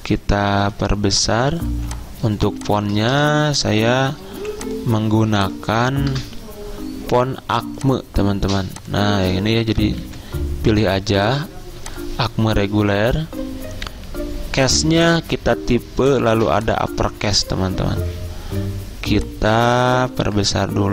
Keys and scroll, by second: 1.3-3.2 typing, 4.4 t, 6.2 BackSpace, 9.8-10.6 typing.